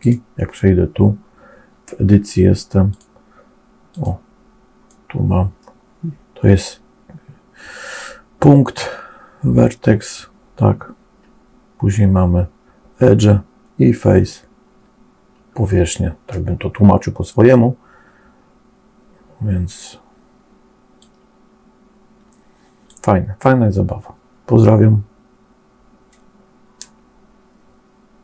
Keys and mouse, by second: 2.7 click, 3.7 click, 4.8 middle click, 21.0-22.8 drag.